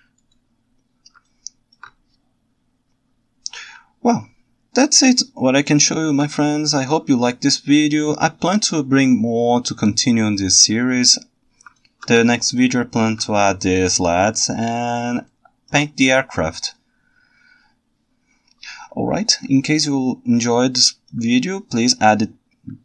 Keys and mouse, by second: 1.3-1.8 ctrl+alt+right drag, 5.7 ctrl+alt+right click, 11.9 ctrl+alt+right drag, 12.3 ctrl+shift+right click, 12.9 ctrl+shift+middle click, 15.3-15.7 ctrl+alt+right drag, 19.7-21.1 ctrl+alt+middle drag.